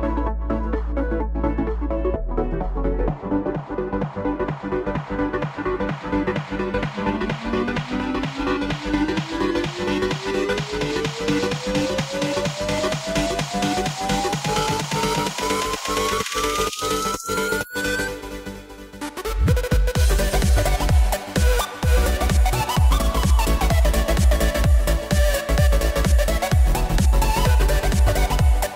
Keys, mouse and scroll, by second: 0.1 shift+click, 1.1 ctrl+b, 3.4 Tab, 4.0 click, 5.4 Tab, 6.1 click, 7.7 ctrl+b, 8.9 Tab, 9.4 click, 10.2 KP_1, 10.7-11.4 scroll up 3, 11.4 click, 12.1 r, 13.9 g, 15.9 click, 16.7 KP_3, 18.1 shift+d, 19.0 s, 20.5 s, 22.1 g, 24.4 shift+d, 26.6 click, 26.8 scroll down 4, 27.1-28.1 middle drag, 28.1 click, 28.2 s.